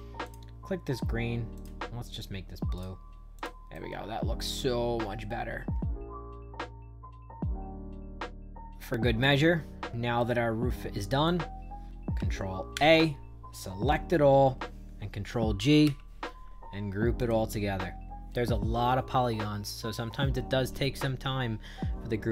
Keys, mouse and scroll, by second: 0.1 click, 1.5 click, 2.7 click, 3.3 click, 3.6-5.8 right drag, 7.0 middle click, 7.5 right click, 8.5 shift+right click, 9.7 middle click, 10.1-11.2 right drag, 12.7 ctrl+a, 15.8 ctrl+g, 17.1 click.